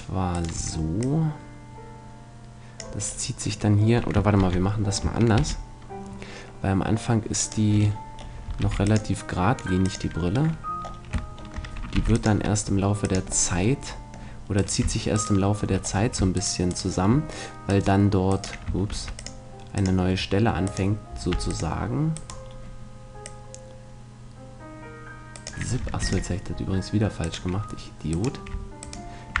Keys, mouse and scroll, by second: 1.0-2.9 drag, 4.4 ctrl+z, 5.3 ctrl+r, 7.5-8.9 right drag, 8.6 ctrl+r, 8.9-9.9 middle drag, 9.9-11.5 drag, 11.9 ctrl+r, 13.1-15.1 drag, 13.5 middle click, 14.5 middle click, 14.5 right click, 15.1-18.5 right drag, 17.7-19.5 drag, 18.9 c, 20.7-24.1 right drag, 21.3 c, 22.4-24.1 middle drag, 23.2-25.1 drag, 26.0 ctrl+r, 27.3-29.1 drag, 28.1-29.4 right drag.